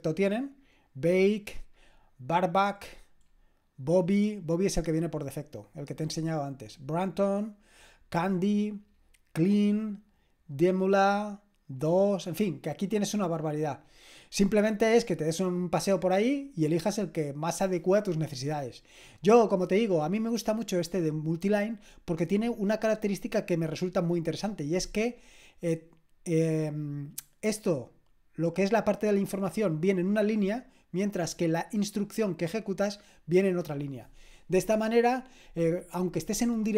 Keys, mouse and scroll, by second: 2.7-5.2 scroll down 1, 5.2-6.4 scroll down 1, 6.4-7.1 scroll down 1, 7.1-8.2 scroll down 1, 8.2-8.9 scroll down 1, 8.9-9.7 scroll down 1, 9.7-10.9 scroll down 1, 10.9-11.8 scroll down 1, 11.8-14.6 scroll down 1, 14.6-16.1 scroll down 1, 16.1-16.8 scroll down 1, 16.8-17.5 scroll down 1, 17.5-18.7 scroll down 1, 18.7-22.3 scroll down 1, 22.3 click, 27.2-29.7 drag, 31.5 click.